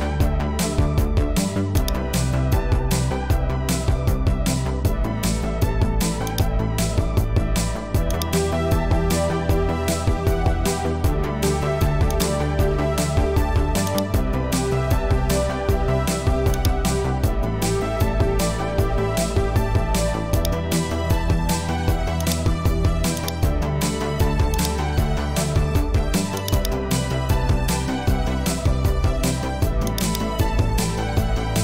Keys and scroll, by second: 4.2 super+a, 9.3 super+d, 14.5-15.3 typing, 15.3 super+a, 15.7 super+d.